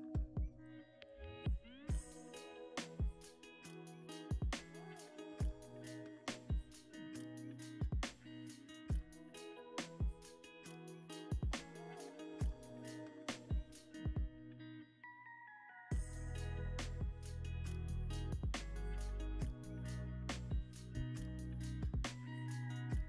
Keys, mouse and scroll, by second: 5.8 double click, 11.0 g, 11.2 z, 14.4 z, 16.1 g, 16.4 y, 18.3 click, 19.1 g, 19.3 z, 21.0 middle click, 22.5 scroll down 1.